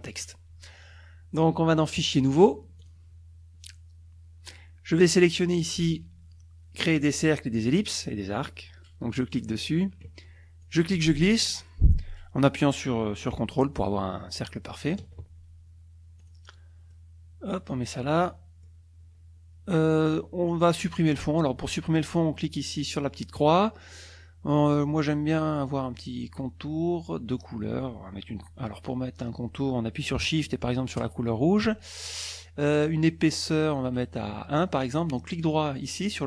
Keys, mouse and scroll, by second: 2.0 click, 2.8 click, 9.4 click, 10.6-15.2 drag, 16.2 click, 16.9-18.1 drag, 18.2 middle click, 23.4 click, 31.0 shift+click, 33.8 right click, 35.9 click.